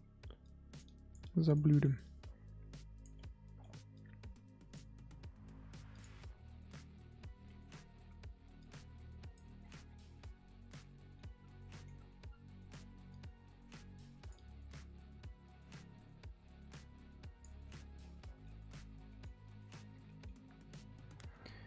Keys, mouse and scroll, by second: 0.4-1.7 drag, 1.7 middle click, 2.0-3.1 drag, 3.1 middle click, 3.9-9.6 drag, 9.6-10.0 scroll down 10, 10.0-11.3 middle drag, 11.3 scroll up 3, 11.6 middle click, 11.9-13.1 scroll up 4, 13.1-17.7 drag, 17.7-18.2 scroll down 10, 18.2 middle click, 18.6-19.1 scroll up 3, 19.1 middle click, 19.2-19.9 scroll up 8, 19.9 scroll down 3, 20.0 middle click, 20.3-21.6 scroll up 2.